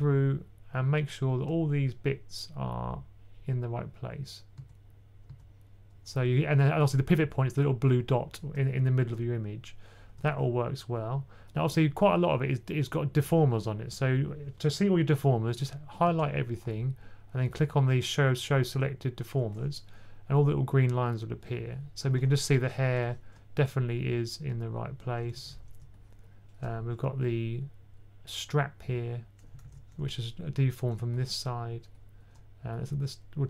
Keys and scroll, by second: 4.5-5.1 typing, 15.9 super+a, 22.6-23.2 typing, 25.2 super+z, 26.5 super+z, 29.2 super+z, 29.2 2, 29.4 super+z, 33.2 typing.